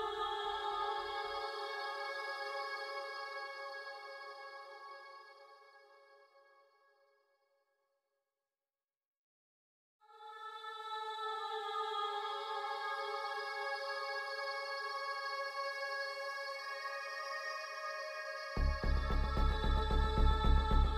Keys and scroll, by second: 5.2-12.4 typing.